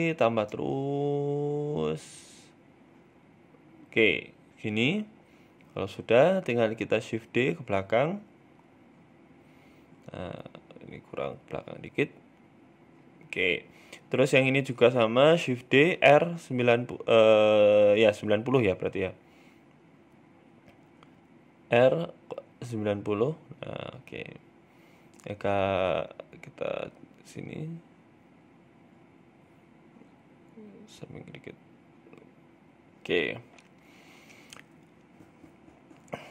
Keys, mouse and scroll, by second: 1.4 shift+middle click, 2.2 click, 4.6 middle click, 5.0 scroll down 3, 5.2 middle click, 6.1 shift+d, 9.1 middle click, 10.0-10.5 scroll up 2, 10.2 shift+middle click, 10.5 middle click, 11.0 g, 12.5-13.8 scroll down 3, 12.7 middle click, 13.8 shift+right click, 14.7 shift+d, 16.2 r, 19.6 ctrl+z, 21.2 r, 23.2 middle click, 23.9 scroll up 2, 24.5 g, 26.9 middle click, 28.1 middle click, 28.5 right click, 28.8 middle click, 29.4 g, 32.2 middle click, 33.0 scroll up 1, 33.1 shift+middle click, 33.4 middle click, 33.9 scroll up 1, 34.2 shift+middle click, 34.5 middle click, 35.4 g.